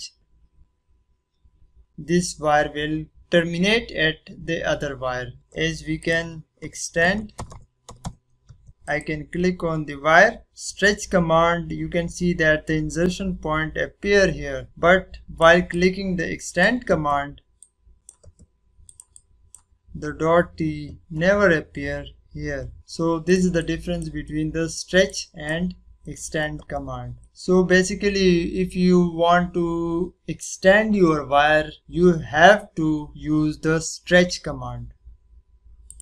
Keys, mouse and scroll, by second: 5.9 click, 6.3-8.5 typing, 8.8 click, 10.7 click, 14.1 scroll up 1, 14.5 scroll down 1, 15.2 click, 16.0-17.6 drag, 19.4 click, 20.0 scroll up 1, 22.7-23.2 scroll down 1, 23.2 click, 24.2 scroll down 1, 25.0 click, 26.0 middle click.